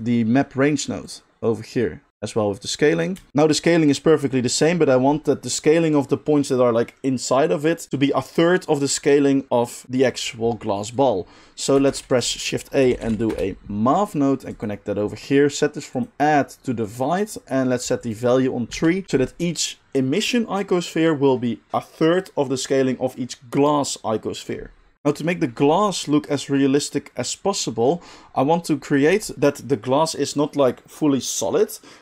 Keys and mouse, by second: 11.9 shift+a, 14.7-15.9 middle drag, 15.9-19.0 drag, 19.0-24.9 middle drag, 24.9-32.0 drag.